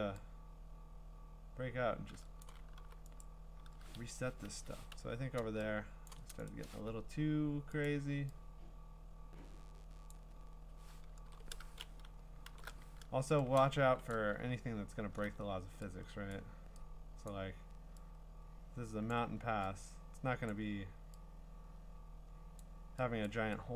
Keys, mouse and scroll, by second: 2.4 click, 2.8 b, 3.2 right click, 4.4 Escape, 4.9-6.1 u, 6.1 click, 6.5 right click, 7.8 click, 10.0 click, 10.2 click, 11.1 ctrl+z, 12.5 alt+shift+n, 14.1 click, 14.4-15.2 scroll, 16.3 click, 17.3 click, 19.1 click, 20.5 click, 22.6 click, 23.3 click.